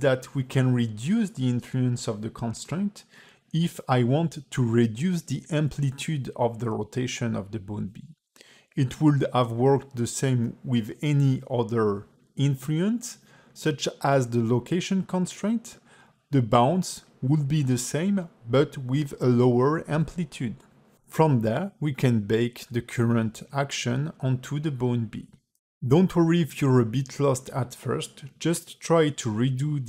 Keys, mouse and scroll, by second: 1.2 click, 2.4 space, 8.4 ctrl+Tab, 9.6 click, 9.9 click, 10.9 g, 15.1 click, 16.5 click, 21.8 ctrl+Tab, 22.3 q, 25.5 space, 26.0 click, 26.4 ctrl+Tab, 26.6 click, 26.9 x, 27.7 click, 28.2 ctrl+Tab, 28.5 space.